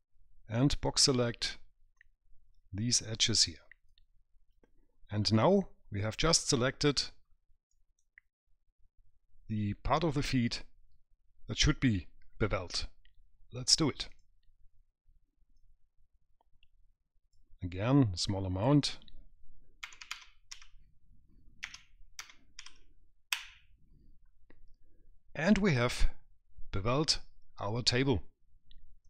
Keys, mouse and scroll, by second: 1.2 click, 2.2 click, 5.6 right click, 7.5-8.0 scroll down 2, 8.0 right click, 14.3 click, 15.8 click, 19.1 click.